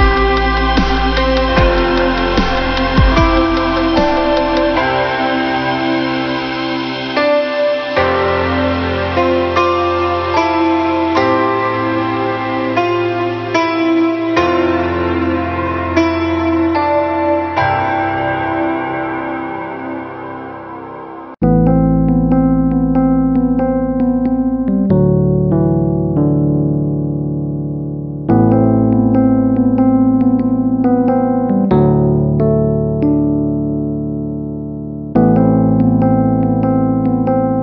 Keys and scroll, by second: 22.8 ctrl+alt+shift+n.